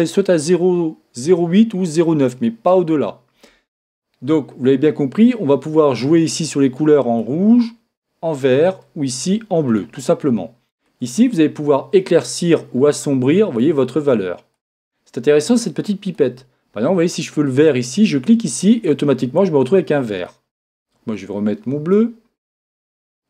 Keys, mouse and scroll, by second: 21.7 click, 22.0 click.